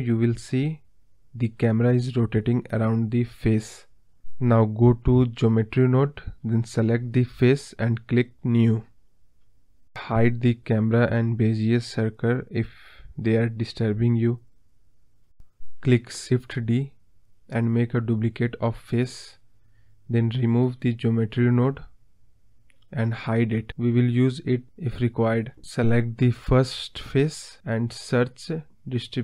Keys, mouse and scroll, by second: 0.9 ctrl+z, 2.5-3.0 scroll up 4, 3.0-3.5 scroll down 4, 3.2 middle drag, 3.5-3.9 middle drag, 3.9 click, 4.9 click, 6.0 click, 6.7-7.1 scroll up 2, 7.1 KP_1, 7.6-8.1 scroll up 1, 8.1 scroll up 1, 8.3-8.9 scroll down 1, 8.9-11.0 scroll down 1, 11.0 KP_Decimal, 11.6-12.8 scroll up 1, 12.8-15.1 drag, 15.1-15.5 scroll down 2, 16.4 click, 17.5 click, 19.8 click, 20.5 shift+d, 21.6 click, 23.4 click, 24.3 click.